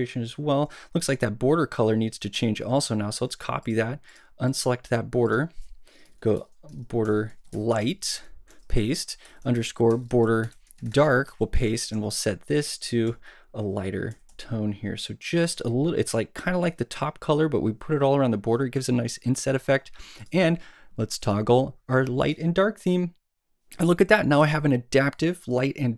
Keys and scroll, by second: 12.0 Left, 12.9 shift+Left, 13.0 shift+Up, 14.1 shift+Down.